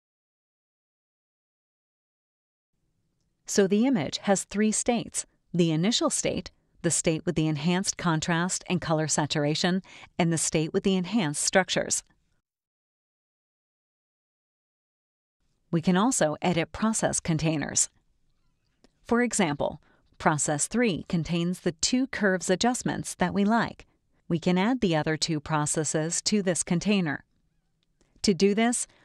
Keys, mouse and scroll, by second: 0.0 click, 2.6 click, 5.3 click, 7.8 click, 10.0 click, 20.1 click, 21.8 click, 23.0 click.